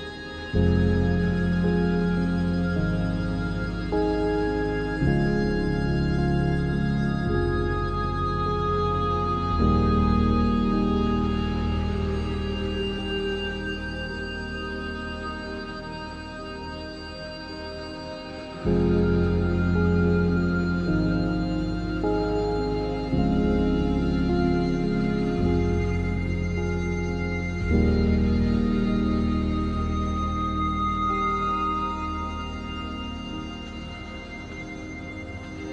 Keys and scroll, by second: 0.2 h, 1.8 r, 3.1 3, 3.6 s, 3.6 x, 4.6 ctrl+z, 5.7 3, 6.4 s, 6.5 z, 7.3 Tab, 20.7 3, 21.8 Tab, 27.9 Tab, 29.1 3, 32.0 Tab.